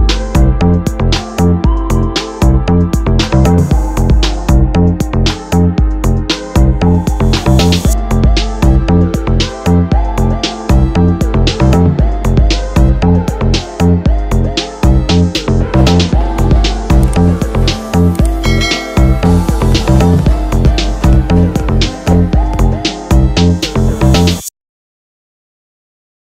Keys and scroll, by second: 14.8 Tab, 16.2 Tab, 20.8 s, 21.9 ctrl+w.